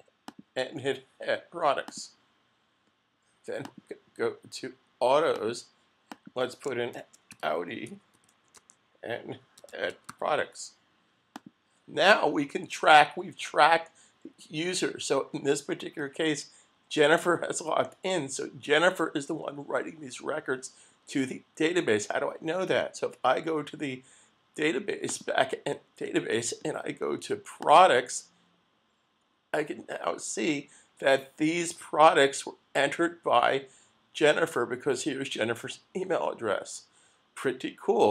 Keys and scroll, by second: 6.7-8.1 typing, 8.6 Tab, 9.3-10.7 typing.